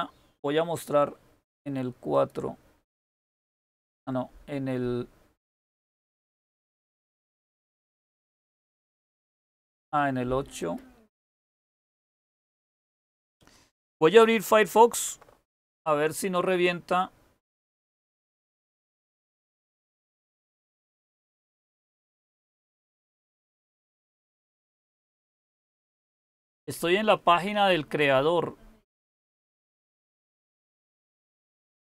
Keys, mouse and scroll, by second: 14.8 alt+super+r, 17.8 Down, 18.0 Down, 18.6 Return.